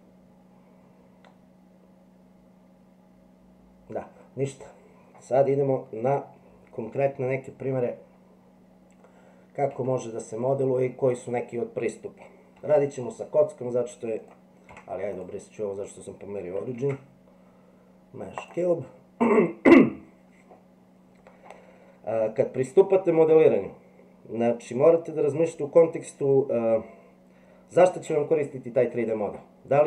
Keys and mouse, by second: 9.7 Tab, 12.6 Delete, 14.2 click, 14.7 x, 16.8 shift+a.